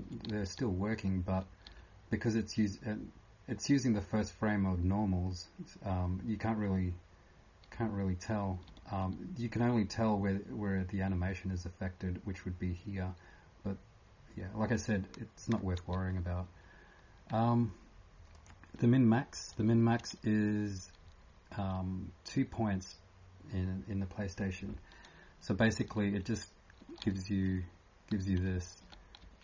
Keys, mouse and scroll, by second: 2.7 typing, 9.0-9.8 typing, 18.3 click, 26.7-27.7 typing, 28.7 typing.